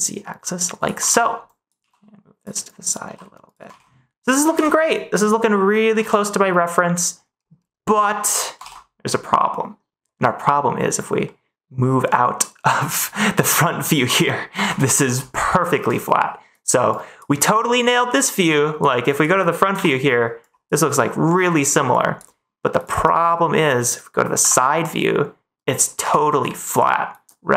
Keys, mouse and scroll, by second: 0.7 click, 1.0 ctrl+s, 1.5 click, 1.7 g, 2.3 click, 2.7 click, 3.0 g, 3.4 click, 3.7 ctrl+s, 11.2-12.8 middle drag, 13.5 middle click, 14.6 ctrl+s, 14.8 middle click, 17.0 ctrl+s, 18.7 ctrl+s, 26.0 a.